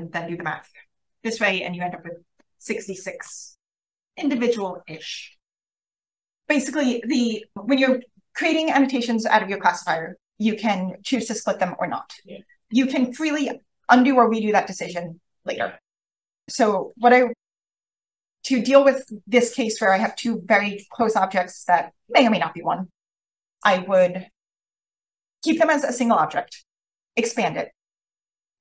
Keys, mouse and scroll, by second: 6.1 Page_Down, 16.8 click, 17.0-19.0 drag.